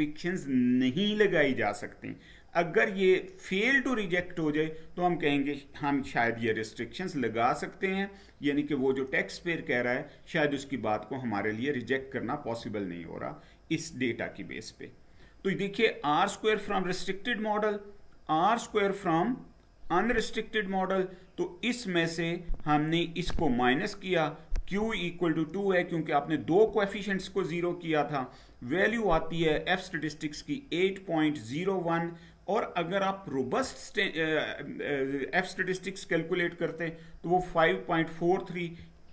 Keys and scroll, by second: 12.5 Down.